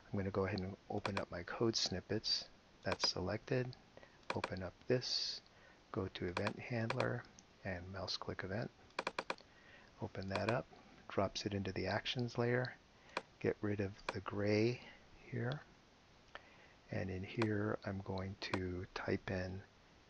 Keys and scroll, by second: 15.2 BackSpace, 15.7 BackSpace.